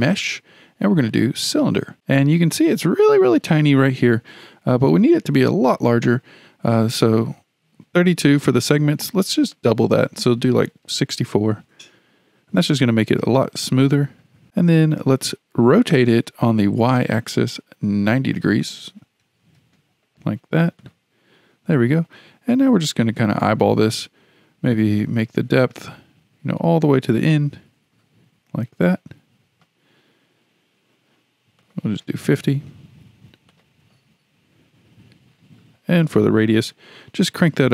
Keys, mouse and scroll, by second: 2.7-5.4 scroll up 7, 5.4-7.4 scroll down 4, 7.7-8.2 scroll up 8, 9.5-12.6 drag, 14.5-17.6 scroll down 6, 18.5-20.9 drag, 22.2-22.6 scroll down 5, 23.0-25.0 scroll up 2, 25.0-28.0 drag, 31.6-33.6 drag, 36.0-37.7 drag.